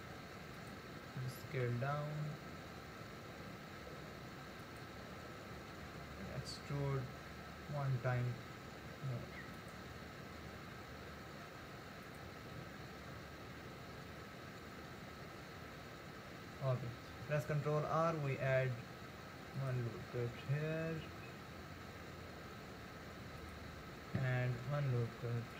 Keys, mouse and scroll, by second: 1.5 s, 5.8 e, 10.6 r, 17.5 ctrl+r, 24.7 ctrl+r.